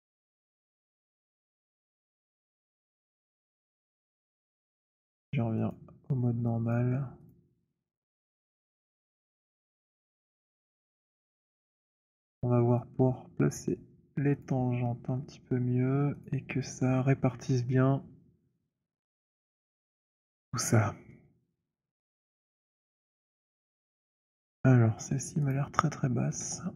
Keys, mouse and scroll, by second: 1.0 3, 2.3-3.4 typing, 5.6 click, 6.7 alt+click, 7.3 click, 8.0 1, 9.4-9.9 scroll, 10.8 alt+middle click, 11.1 alt+click, 13.6 click, 14.3 shift+click, 16.2 alt+click, 19.1 click, 22.3 right click, 25.4 click, 26.4 z.